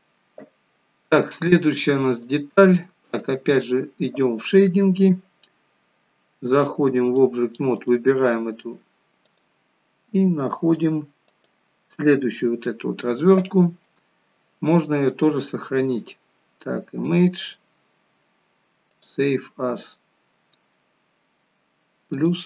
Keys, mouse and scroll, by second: 2.0 click.